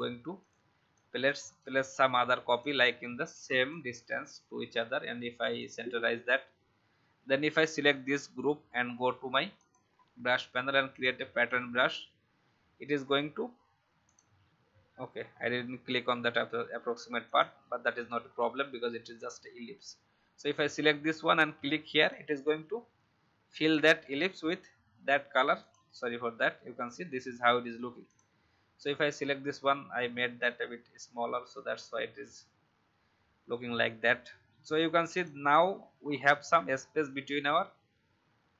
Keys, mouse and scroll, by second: 0.4-12.5 drag, 15.1-15.5 alt+scroll down 1, 17.2 click, 18.2-21.9 scroll up 1, 21.9 click, 29.9-34.7 scroll up 1, 35.1 click, 35.9 alt+scroll up 1.